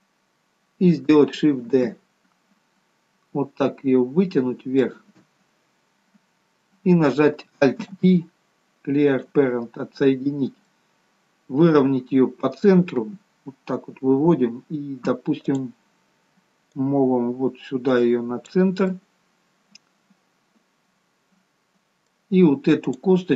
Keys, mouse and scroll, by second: 0.1-0.8 scroll up 3, 0.8-1.4 scroll down 1, 2.0 shift+d, 10.7 scroll down 2, 10.9 middle click, 15.7 click, 19.2 middle click, 23.1 click.